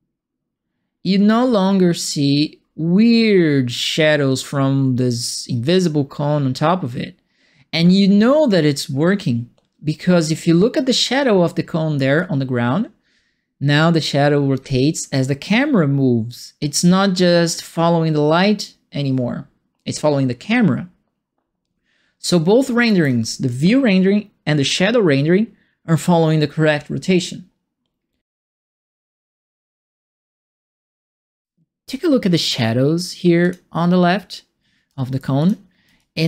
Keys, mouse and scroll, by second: 12.1-22.8 alt+drag, 31.3 alt+click, 33.4 click, 35.3 click, 35.9-36.2 alt+drag.